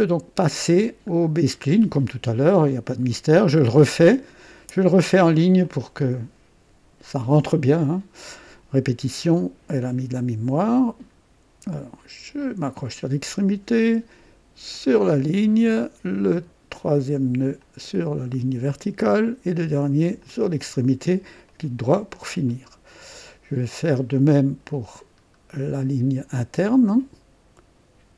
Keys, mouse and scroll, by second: 0.7 scroll up 1, 1.1 scroll down 1, 5.6 click, 7.8 click, 9.3 scroll up 1, 12.3 click, 14.7 click, 15.2 right click, 17.5 click, 20.1 click, 21.4 right click, 22.5 right click, 23.8 right click, 25.0-25.3 scroll up 1, 25.5 right click.